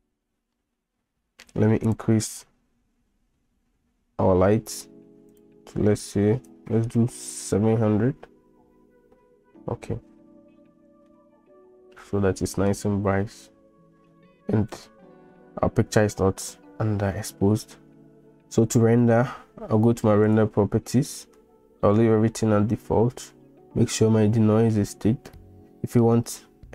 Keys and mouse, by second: 1.9 click, 5.5-8.1 drag, 11.1-12.7 middle drag.